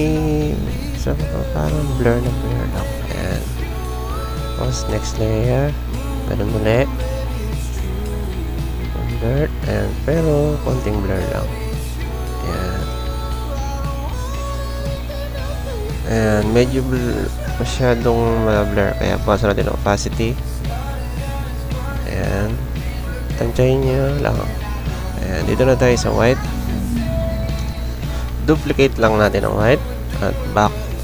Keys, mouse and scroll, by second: 13.3 click, 14.5 click, 28.2 ctrl+j.